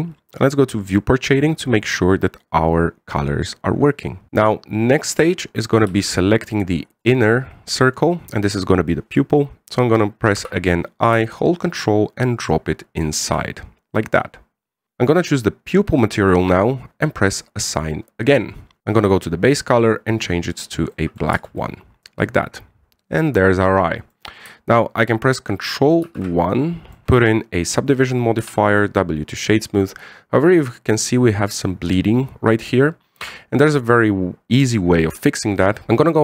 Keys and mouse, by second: 1.7 click, 2.2-4.3 middle drag, 5.7 right click, 6.7 c, 8.1-9.4 middle drag, 11.2 i, 14.3 middle click, 15.8 click, 18.1 click, 21.7 middle click, 22.1 Tab, 22.4-24.9 middle drag, 26.8 ctrl+1, 27.0 w, 29.2 w, 29.8-30.6 middle drag, 34.0 Tab.